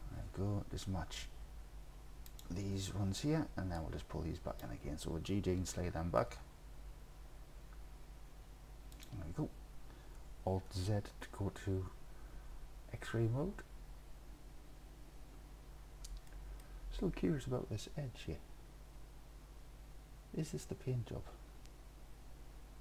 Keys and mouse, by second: 2.3 click, 3.9 click, 6.3 g, 6.5 g, 9.0 click, 10.7 alt+z, 16.4 click.